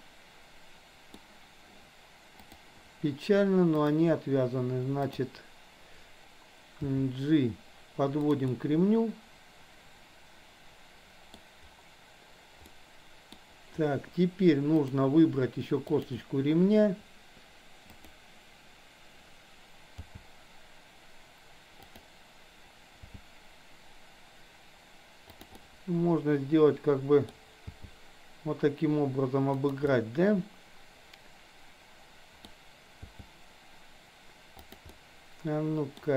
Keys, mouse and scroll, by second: 0.0-1.3 middle drag, 2.5 click, 3.8 click, 5.1 click, 7.0 g, 8.5-11.5 middle drag, 12.7-13.5 middle drag, 14.8 click, 16.0 shift+click, 18.0 click, 20.0 g, 25.6-27.5 middle drag, 25.6 scroll up 1, 27.3 scroll down 1, 27.7 g, 30.0-32.6 middle drag, 33.1 g, 34.8-36.1 middle drag.